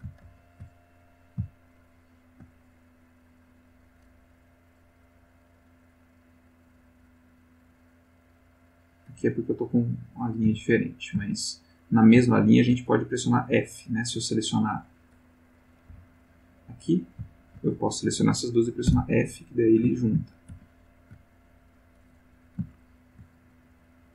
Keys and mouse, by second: 0.2 ctrl+z, 1.0 ctrl+click, 1.8 shift+click, 3.5 right click, 8.7 click, 9.1 g, 9.7 click, 10.3 click, 10.4 g, 10.9 click, 11.3 shift+click, 11.8 shift+click, 12.4 shift+click, 14.0 click, 15.5 click, 15.9 x, 16.1 click, 16.9 click, 17.4 shift+click, 18.9 f, 20.0 ctrl+z, 22.7 shift+click.